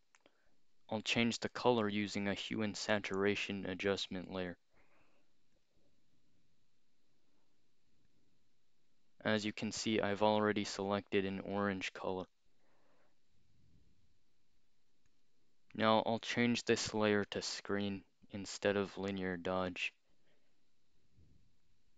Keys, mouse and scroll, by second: 0.9 click, 1.2 scroll up 2, 1.8 click, 3.0 right click, 4.3 click, 5.5 click, 8.1-11.8 drag, 15.1 click, 16.2 click, 17.5 click, 19.4 click.